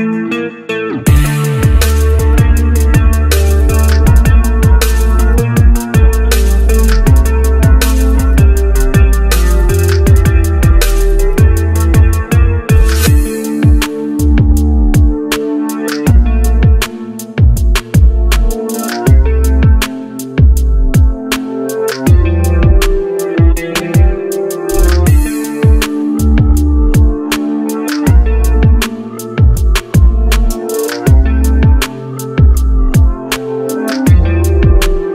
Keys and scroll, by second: 2.1 ctrl+c, 3.9 ctrl+v.